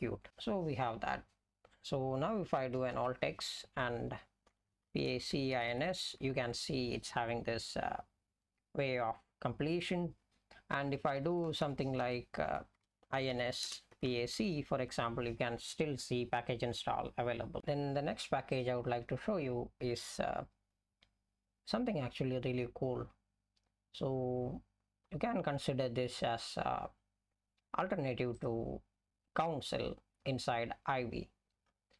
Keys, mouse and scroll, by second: 3.0 alt+x, 4.2-6.2 typing, 10.9-14.9 typing, 17.6 ctrl+g.